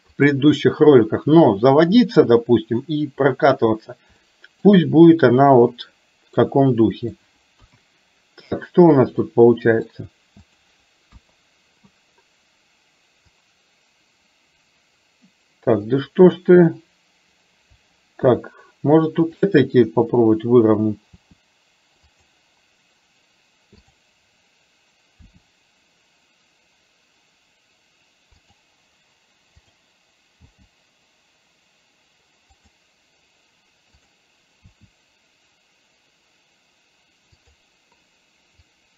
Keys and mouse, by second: 4.3 shift+middle click, 6.4 middle click, 7.7 KP_1, 9.3 middle click, 10.6 click, 11.2 KP_1, 13.4-15.9 drag, 18.3 KP_3, 19.3 click, 21.3 r, 24.0 click, 25.3 r, 29.7 click, 30.4 g, 34.7 r, 38.8-38.9 drag.